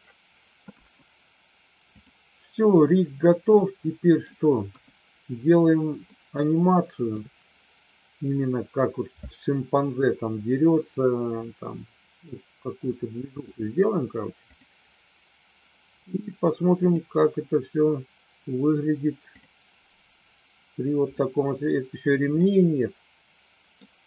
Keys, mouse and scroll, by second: 0.6 KP_1, 1.9 click, 3.4 middle click, 4.6 KP_1, 6.2-7.3 middle drag, 14.5 click, 16.9 click, 19.3 click, 21.0 middle click, 22.4-23.8 middle drag.